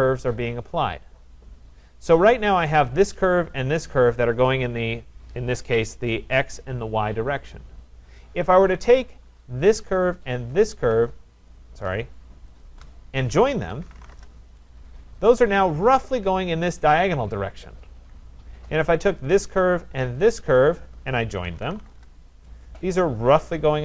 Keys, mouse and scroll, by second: 2.8 click, 3.9 click, 8.9 click, 9.7 click, 10.1-10.9 Caps_Lock, 10.7 click, 12.6 shift+click, 13.5-14.5 typing, 13.7 shift+click, 15.3 click, 16.6 typing, 19.4 click, 20.3 shift+click, 21.2-22.3 typing.